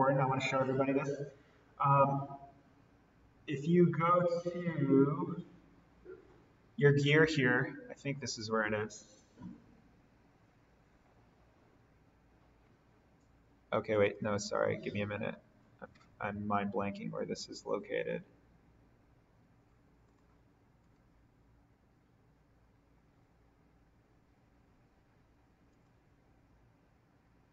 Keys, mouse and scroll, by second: 7.0 click, 14.0 click, 16.0-16.3 scroll down 1, 20.0 click, 20.7 right click, 25.6 click.